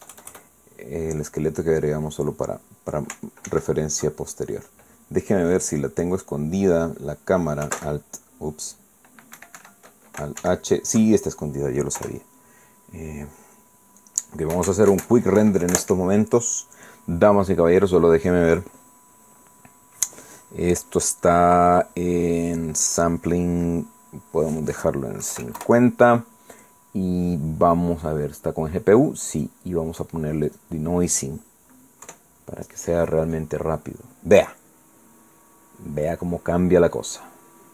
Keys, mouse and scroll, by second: 0.0 KP_Add, 2.8 click, 4.5 alt+h, 6.8 click, 7.2 click, 8.8 alt+c, 10.4 Escape, 11.4 alt+h, 13.0 KP_0, 16.7 click, 18.9 click, 20.7-21.0 scroll down 2, 23.9 click, 25.4 click, 26.2 KP_5, 26.4 KP_0, 30.3 click, 31.5 click, 33.0 F12.